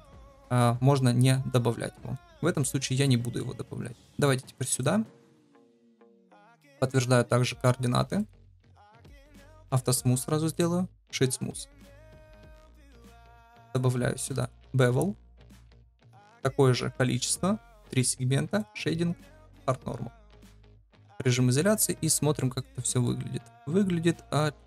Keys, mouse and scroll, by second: 1.9 shift+click, 3.0 middle click, 6.0 ctrl+a, 9.7 click, 10.7 middle click, 12.7 drag, 16.0 ctrl+v, 17.7 click, 17.8 click, 18.5 click, 19.3-20.8 drag, 20.8 KP_Divide, 21.5-21.8 middle drag, 22.3 shift+middle drag, 23.0-24.6 middle drag.